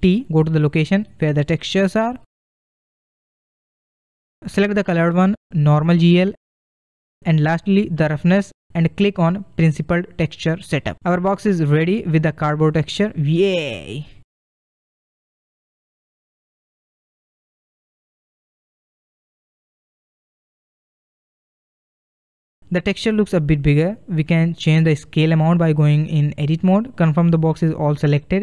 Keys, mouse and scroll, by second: 0.4 ctrl+shift+t, 15.2-15.5 drag, 16.1-19.3 middle drag, 19.3-20.1 scroll up 1, 20.1-21.9 middle drag, 21.9-22.3 scroll down 1, 22.3-25.1 middle drag, 25.1-27.0 drag, 27.7 scroll down 1, 28.0-28.4 middle drag.